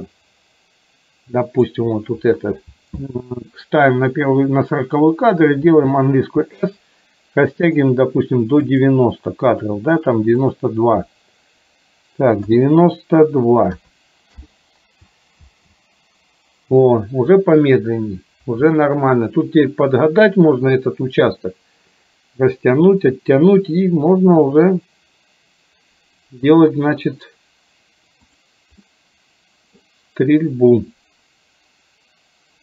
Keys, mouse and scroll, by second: 5.8 s, 10.5-14.4 drag, 15.5 space, 28.3 click, 28.9-29.9 middle drag.